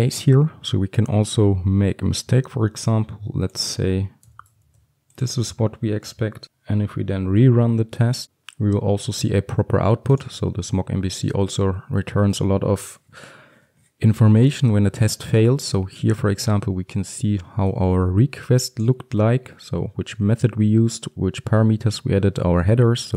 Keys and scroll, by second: 4.7 ctrl+s, 8.2 ctrl+F5.